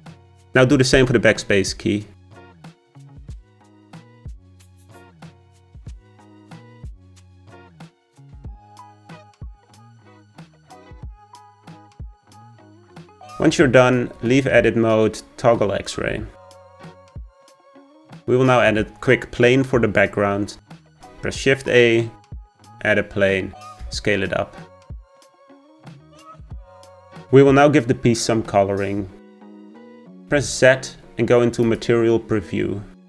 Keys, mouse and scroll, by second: 3.0 l, 4.1 x, 5.4 click, 8.0 g, 13.1-14.3 scroll down 2, 14.3 Tab, 14.6 z, 16.0 middle click, 16.9 click, 17.3 shift+middle click, 18.2-20.6 scroll down 3, 20.6 shift+a, 23.3-23.9 scroll down 4, 23.9 s, 26.3-27.2 scroll up 4, 30.0 click, 30.4 z.